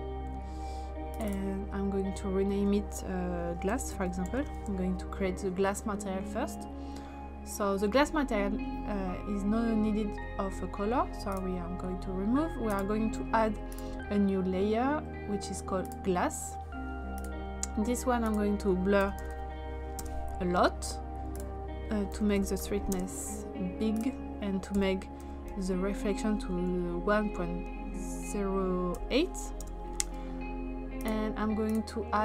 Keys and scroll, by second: 3.5-4.9 typing, 18.8-19.8 typing, 20.0 Return, 21.9-23.1 typing, 24.5-25.5 typing, 28.9 8, 29.6 Return.